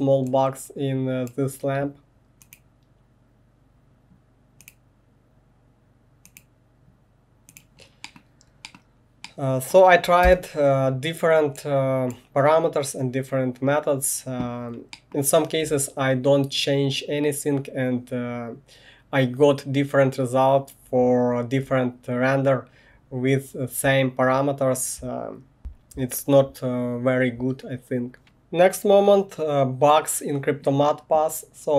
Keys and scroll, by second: 10.4 space.